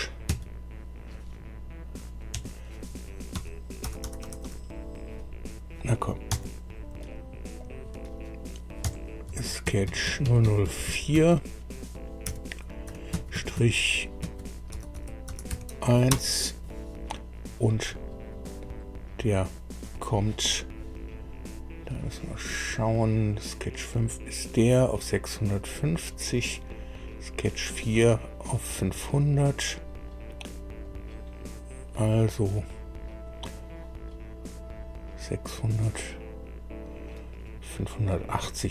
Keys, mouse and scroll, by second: 0.2 Right, 2.3 F2, 3.3 Right, 3.8 BackSpace, 4.0 BackSpace, 4.2 BackSpace, 4.4 BackSpace, 6.3 F2, 7.0 click, 7.5 click, 8.8 F2, 9.3 Left, 9.6 Right, 9.8 Right, 10.1 Right, 10.2 Right, 10.4 Right, 10.6 Right, 12.2 4, 13.1 Delete, 13.1 Right, 13.5 Right, 14.2 Right, 14.7 BackSpace, 14.9 BackSpace, 15.3 BackSpace, 15.5 1, 16.1 Return, 22.7 click, 25.6 click, 30.8 click.